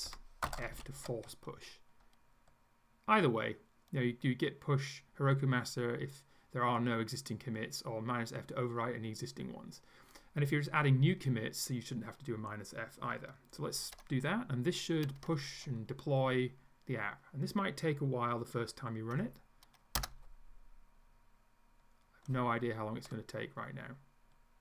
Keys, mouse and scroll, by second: 0.0 Right, 0.4-1.4 typing, 20.0 Return.